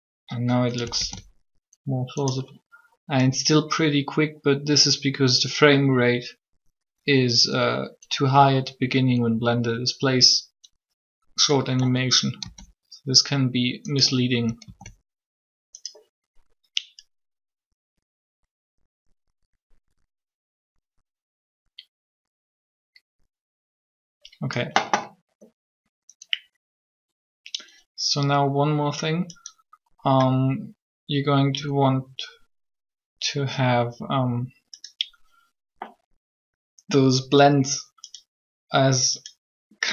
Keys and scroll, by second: 1.0 alt+a, 12.4 alt+a, 14.6 alt+a.